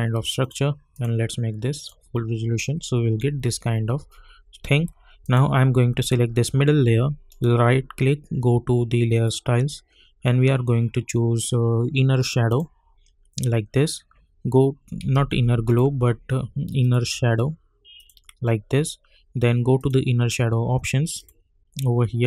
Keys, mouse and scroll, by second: 5.2 click, 7.3 right click, 9.1 click, 12.4 click, 15.1 ctrl+z, 15.6 right click, 16.8 click, 22.1-22.2 scroll down 1.